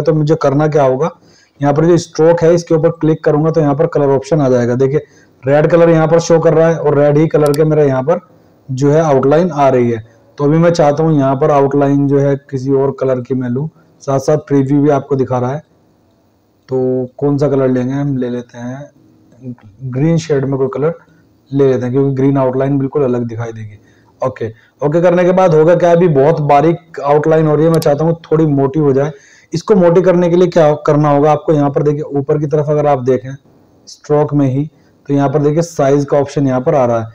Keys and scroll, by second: 1.4 ctrl+1, 5.5 ctrl+1, 10.4 ctrl+1, 32.5 ctrl+1.